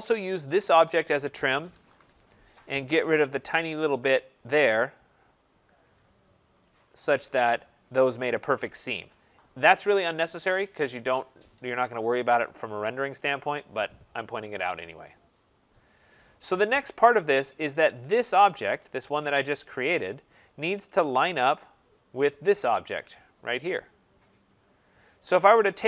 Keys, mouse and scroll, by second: 0.0 click, 1.1-2.2 typing, 4.1 click, 6.3 Escape, 6.4 typing, 6.6 Escape, 7.1 scroll, 9.1 scroll, 9.5 middle click, 12.1 middle click, 12.3 middle click, 12.4 middle click, 13.7 right click, 13.7-14.8 scroll, 15.0-16.4 scroll, 16.4-17.4 scroll, 18.0 click, 18.3 scroll, 18.3-19.0 scroll up 7, 19.0 click, 19.2-20.1 scroll up 3, 20.7-21.3 scroll down 6, 23.5-24.0 scroll down 1, 24.2-24.5 scroll down 5.